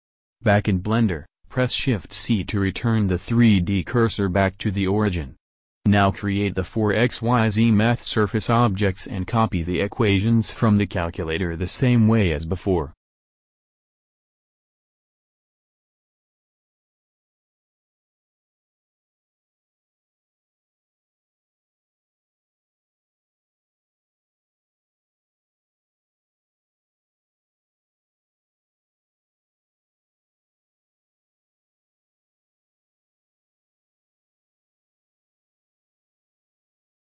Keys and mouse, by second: 1.7 shift+c, 2.5-4.9 middle drag, 7.1 shift+a, 10.3 alt+Tab, 13.1 alt+Tab, 14.0-15.1 drag, 23.3-25.2 drag, 25.2 shift+a, 28.1 alt+Tab, 30.6 alt+Tab.